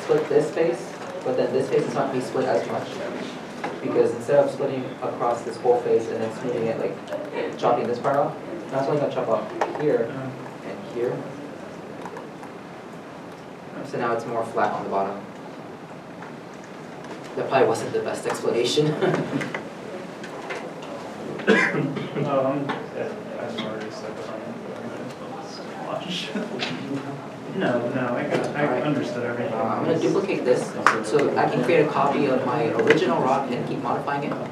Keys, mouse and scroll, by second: 11.5 middle click, 11.5 Tab, 12.1 middle click, 15.4-16.0 scroll up 1, 16.0 middle click, 16.6-17.2 scroll down 1, 17.2 Tab, 18.3 middle click, 18.5 1, 19.4 middle click, 19.6-20.6 scroll, 20.6-20.9 scroll up 1, 20.9 middle click, 21.6 g, 21.9 Tab, 22.5 middle click, 23.3-23.9 scroll down 1, 23.9 middle click.